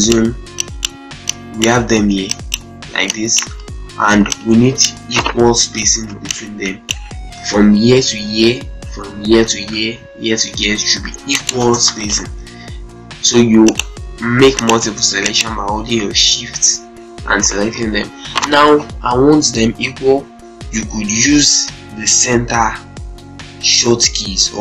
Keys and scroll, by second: 5.9 z, 7.3 ctrl+space, 11.0 z, 11.3 ctrl+space, 11.6 ctrl+F3, 11.8 ctrl+F4.